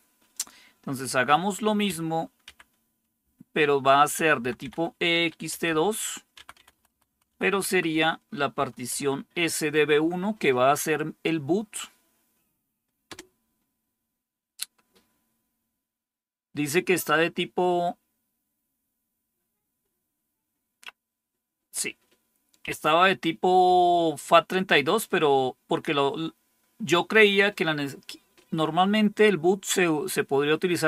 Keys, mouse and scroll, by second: 0.3 click, 1.8 Up, 2.4 Up, 3.1 Left, 3.8 Left, 4.3 Left, 4.3 Left, 4.5 Left, 5.4 2, 5.6 Delete, 6.3 Right, 6.5 Right, 6.7 Right, 6.8 Right, 7.0-8.8 typing, 7.6 Right, 7.8 Right, 13.0 Return, 22.5 typing.